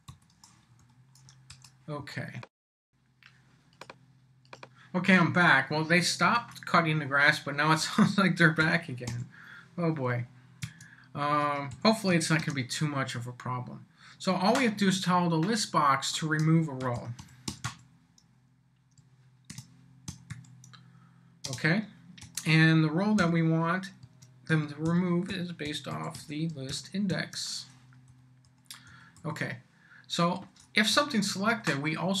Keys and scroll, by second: 0.0-0.6 typing, 0.8 Up, 1.5 Return, 2.0 Up, 6.3 Return, 7.8 Up, 8.6 l, 9.1 b, 10.6 Tab, 11.5-12.9 typing, 16.6-18.1 typing, 19.5-23.2 typing, 24.0 Tab, 24.6-26.7 typing, 27.1 shift+Tab, 27.8 Tab, 28.1 Down, 30.9 Return, 31.4 Up.